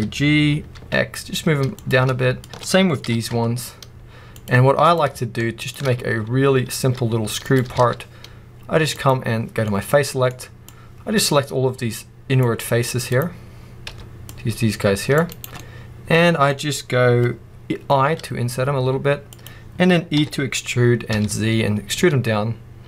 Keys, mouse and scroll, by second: 2.3 click, 2.9 g, 4.7 click, 5.5 shift+click, 6.7 s, 7.5 click, 7.7 alt+a, 8.9 click, 9.8 middle click, 10.6 click, 12.9 click, 13.8 c, 15.3 right click, 15.5-19.2 middle drag, 17.9 i, 19.6 click, 20.1 e.